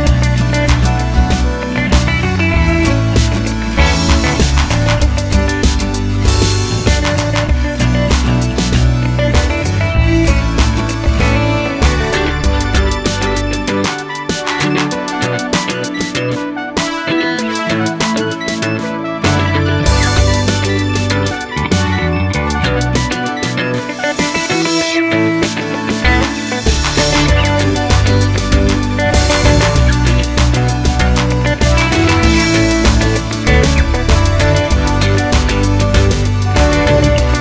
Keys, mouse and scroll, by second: 0.9 s, 1.2-4.6 middle drag, 1.9 ctrl+z, 2.3 KP_1, 2.8 z, 2.9 scroll up 2, 3.0 e, 3.6 ctrl+z, 3.9 r, 4.6 click, 4.7-6.0 drag, 4.7-6.3 middle drag, 4.9-5.4 scroll up 2, 6.3 a, 6.7 shift+d, 7.5 g, 8.2 click, 10.9-11.9 middle drag, 11.9 Tab, 13.5 click, 13.9-14.8 scroll down 3, 14.0-14.6 middle drag, 14.8-15.2 middle drag, 15.0 scroll up 1, 15.2 Tab, 15.6 g, 17.1 click, 17.3 a, 18.0-20.8 drag, 18.2 s, 20.9-24.1 middle drag, 22.5 z, 23.1 1, 24.1-29.4 drag, 26.7 s, 27.7 s, 29.5-31.8 middle drag, 29.7 z, 31.8 Tab, 32.0 middle click, 32.3-32.7 scroll up 2, 32.7 click, 32.8 Tab, 33.1 2, 33.2 3, 33.5 click, 33.6 middle click, 34.4 alt+click, 35.1-36.1 middle drag, 35.3 shift+d, 35.9 Tab, 36.4 click, 37.3 Tab.